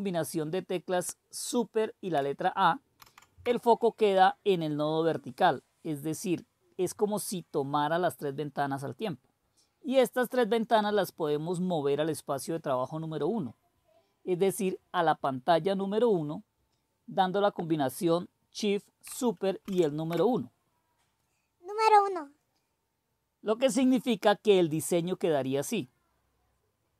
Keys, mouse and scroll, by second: 3.0 super+a, 19.6 super+!.